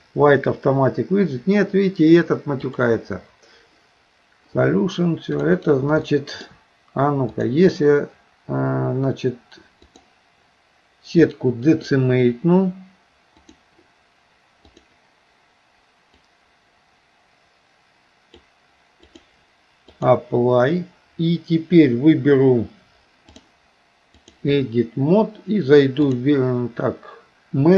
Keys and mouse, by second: 2.7 click, 6.1 shift+middle click, 7.4 click, 9.9 click, 13.4-14.9 drag, 16.4-18.4 drag, 19.2-20.2 drag, 23.4-24.4 drag, 26.1-27.7 drag.